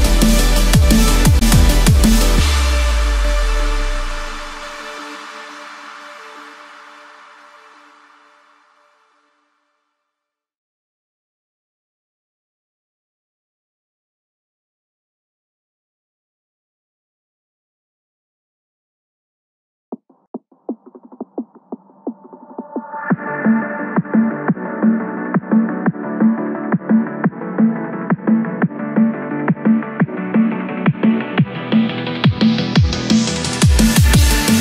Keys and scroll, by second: 2.3 BackSpace, 10.7 ctrl+z, 17.0 ctrl+z, 26.1 ctrl+z.